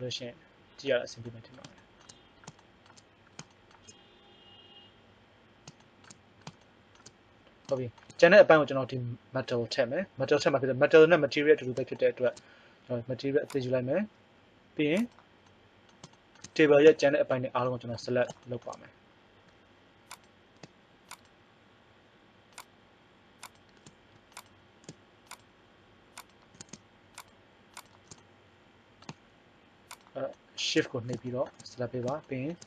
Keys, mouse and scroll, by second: 13.4 click, 20.1-27.2 drag, 28.7-30.4 right drag.